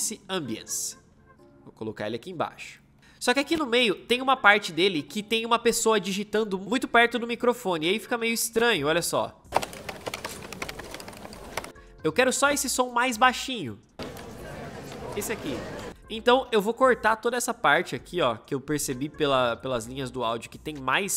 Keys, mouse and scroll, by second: 9.3 space, 13.7 space, 16.8 c.